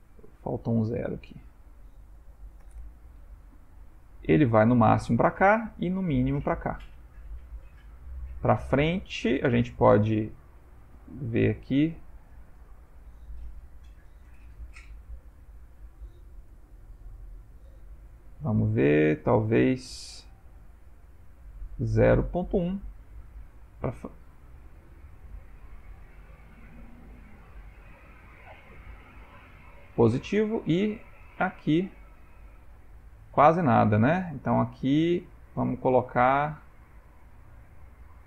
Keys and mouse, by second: 0.4 click, 3.9 g, 14.0 g, 16.5 g, 29.4 g, 31.3 g.